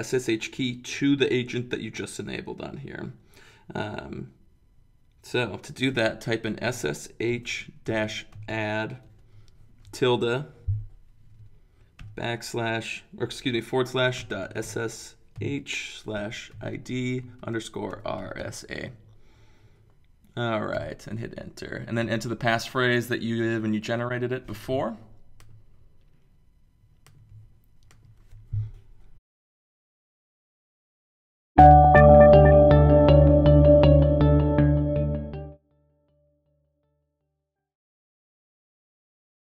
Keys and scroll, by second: 6.5-10.5 typing, 11.7-12.5 typing, 13.9-18.9 typing, 20.7 Return.